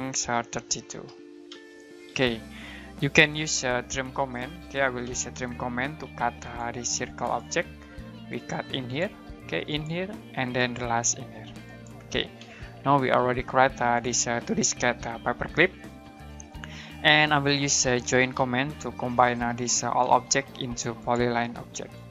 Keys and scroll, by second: 0.4-1.5 typing, 3.7-5.0 typing, 12.4 space, 17.8-20.0 typing.